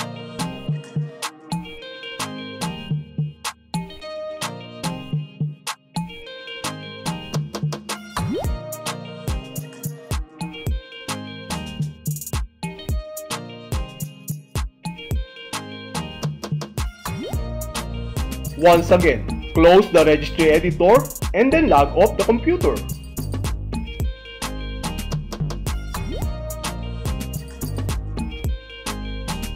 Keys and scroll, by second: 1.4 alt+e, 2.8 n, 4.8 d, 12.1 Return, 13.6 Return, 16.1 Return, 17.5 F5, 20.5 shift+Tab, 22.1 Left, 23.2 Left, 24.5 Left, 25.6 Left, 26.6 Left, 27.6 Left, 28.7 Left.